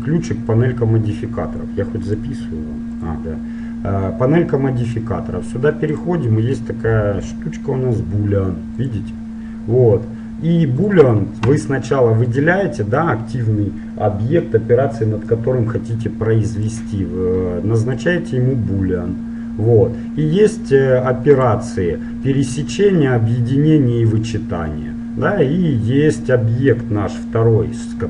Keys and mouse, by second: 4.9-7.8 drag, 11.0-12.4 drag, 12.4-14.4 right drag, 16.7-18.6 drag, 21.5-23.5 drag.